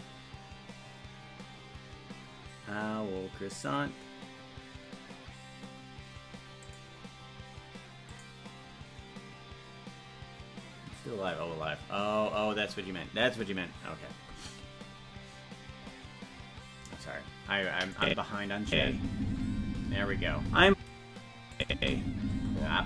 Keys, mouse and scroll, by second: 18.0 click, 18.6 space, 21.5 click, 21.7 space.